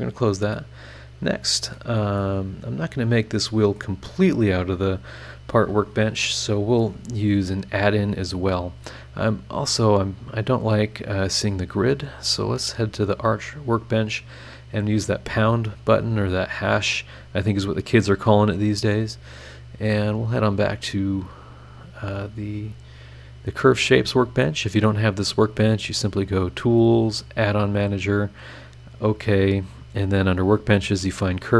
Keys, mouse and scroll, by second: 0.5-1.9 middle drag, 0.6-1.9 drag, 0.6-1.9 right drag, 2.2-3.9 middle drag, 2.2-3.9 drag, 2.2-3.9 right drag, 4.0-6.4 middle drag, 4.1-6.4 drag, 4.1-6.4 right drag, 9.7 click, 12.9 click, 15.3 click, 16.8 click, 19.8 click, 23.7 click, 26.2 click, 27.2 click, 28.9 click.